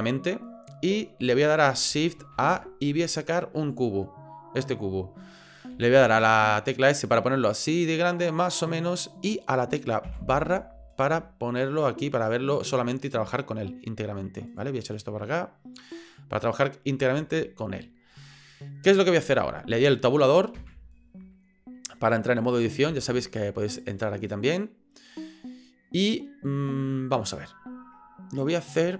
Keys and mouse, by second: 2.3 shift+a, 5.7 s, 12.0-13.3 middle drag, 14.5-15.8 drag, 16.5-17.6 middle drag, 17.8 shift+middle click, 18.5 middle click, 20.6 Tab, 22.9 Tab, 23.8 click, 25.3 middle click.